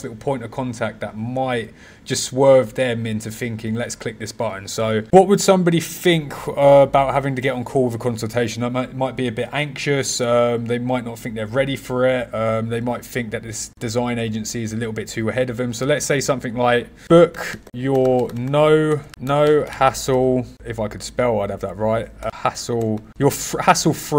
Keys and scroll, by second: 17.0 b, 17.5 y, 19.1 BackSpace, 19.6 h.